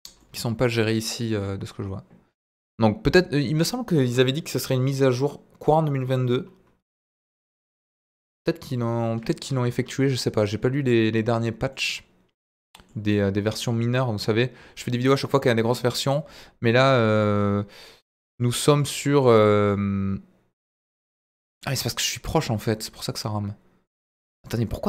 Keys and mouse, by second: 0.1-0.8 middle drag, 11.7-12.9 middle drag, 19.6-21.5 middle drag, 22.4-23.9 middle drag, 24.4-24.8 middle drag.